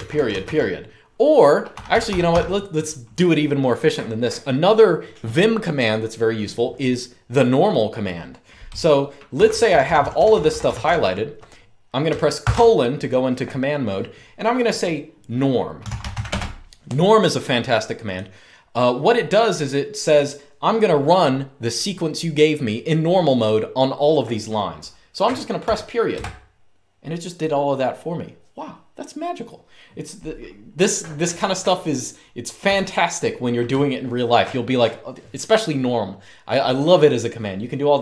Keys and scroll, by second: 0.0-0.1 typing, 1.4-2.0 typing, 8.8-11.0 typing, 12.1 typing, 15.3-16.3 typing, 25.3-25.8 typing, 32.4 u.